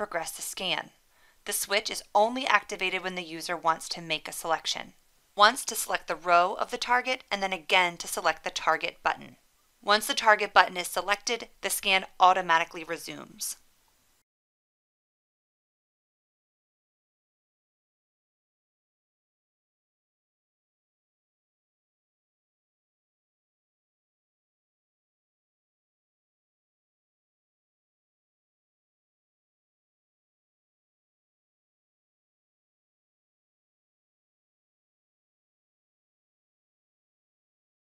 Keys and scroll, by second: 19.2 1, 19.6 1, 24.5 1, 30.0 1.